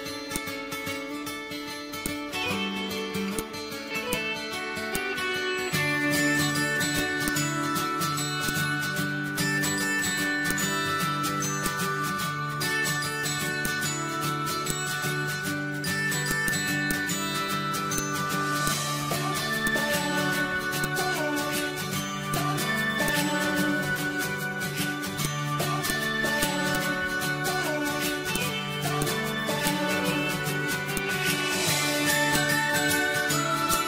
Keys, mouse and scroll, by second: 1.1 scroll up 1, 1.2 scroll down 1, 2.0-6.9 drag, 6.9-8.4 drag, 8.4-10.4 drag, 11.2 ctrl+z, 11.6-13.5 drag, 13.6 click, 14.4 ctrl+z, 14.7 click, 16.3 click, 18.0 click, 19.7-20.8 drag, 21.2 ctrl+c, 21.7 ctrl+v, 22.3-25.3 drag, 26.5 z, 26.8-28.3 drag, 28.3 click, 31.0 click, 32.3-33.7 drag.